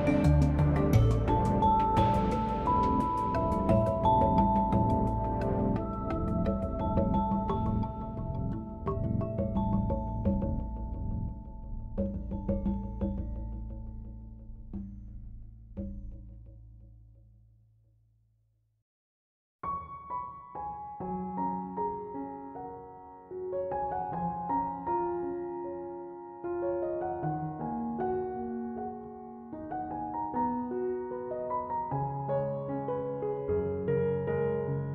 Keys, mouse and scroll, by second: 1.8-4.5 drag, 4.8-7.5 middle drag, 7.5 Tab, 7.9-12.8 middle drag, 13.1 Tab, 13.6-18.2 middle drag, 20.2-23.5 scroll down 1, 25.1 click, 27.3-29.3 drag, 29.3-30.5 scroll down 2, 30.5-32.2 scroll down 1, 32.2-33.0 scroll down 1.